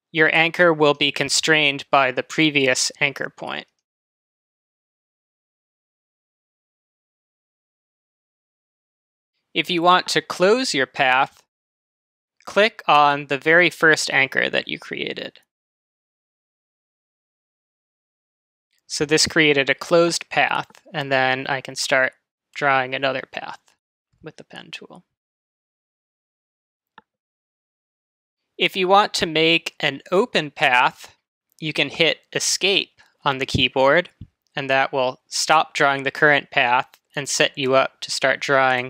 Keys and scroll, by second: 32.8 Escape.